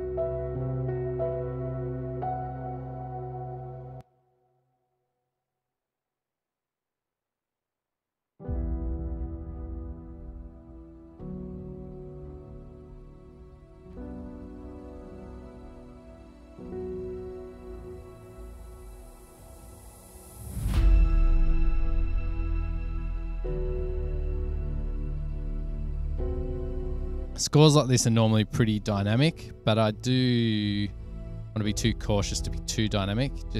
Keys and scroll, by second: 4.3 Return, 4.4 Return, 12.2 F8, 26.5 super+=.